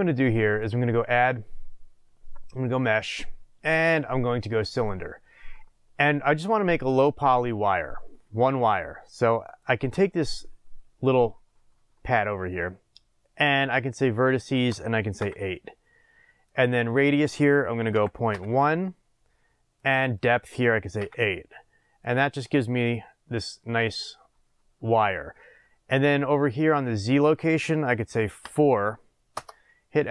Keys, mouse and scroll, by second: 0.4-9.7 drag, 6.2-7.6 scroll up 2, 7.6-8.0 scroll down 2, 14.4-16.5 drag, 16.8-19.8 drag, 20.1-22.1 drag, 22.8 scroll, 25.0 scroll up 1, 27.0-30.1 drag, 29.4 Return.